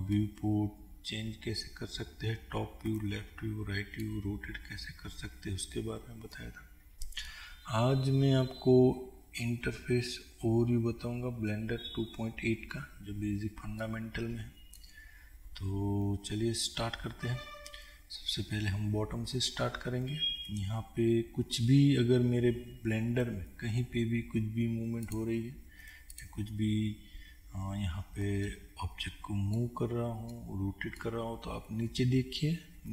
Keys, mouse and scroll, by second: 4.5-5.2 scroll down 2, 5.2-5.8 scroll up 2, 5.8-6.5 scroll up 1, 25.2 click, 28.7-32.9 middle drag.